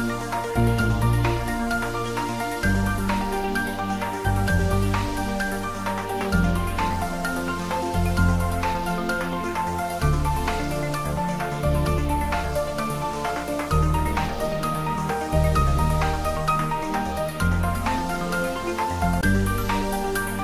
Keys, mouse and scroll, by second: 10.2 Right, 11.4 click.